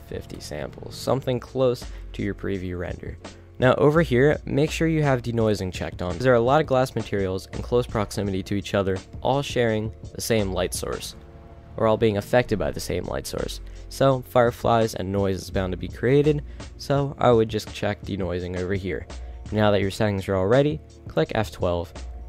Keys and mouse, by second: 0.8 middle click, 5.0-6.2 drag.